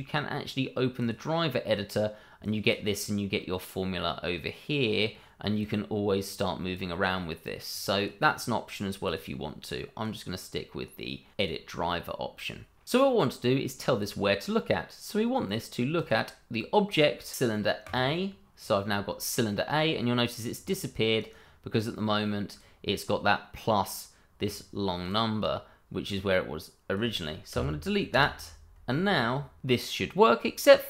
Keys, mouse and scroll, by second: 1.0 click, 5.0 click, 10.0 right click, 11.4 click, 15.9 click, 17.8 click, 21.2 right click, 22.5 click, 25.4 double click, 27.5 BackSpace, 28.1 Return.